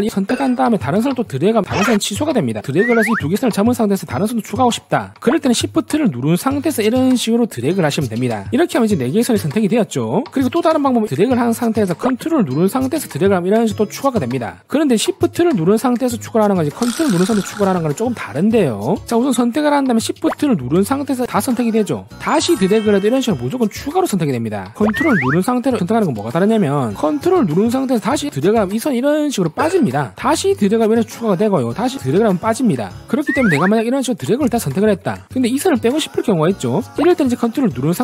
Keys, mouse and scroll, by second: 0.0 click, 1.2 click, 2.9 click, 7.5 shift+click, 11.4 click, 13.5 ctrl+click, 19.4 click, 20.9 shift+click, 21.5 shift+click, 22.6 shift+click, 23.3 shift+click, 24.0 shift+click, 25.5 ctrl+click, 26.3 click, 28.4 ctrl+click, 29.1 ctrl+click, 30.7 ctrl+click, 32.0 ctrl+click, 34.5 click.